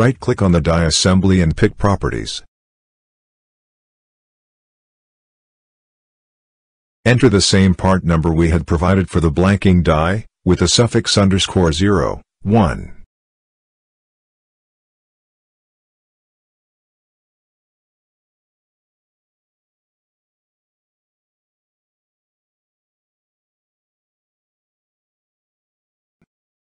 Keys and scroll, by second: 8.1 m, 9.4 BackSpace, 10.4 m, 11.0 t, 12.5 -, 12.7 t, 13.3 d, 14.3 -, 15.7 a, 16.3 -, 17.7 0, 19.4 1, 20.7 shift+-, 22.9 0.